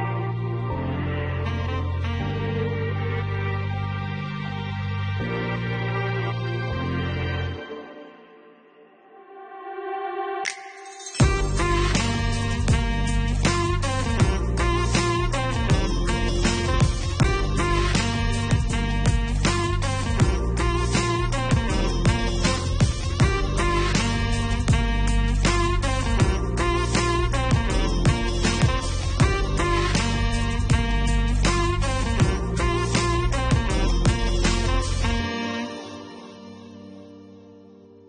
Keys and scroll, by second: 0.7-2.3 typing.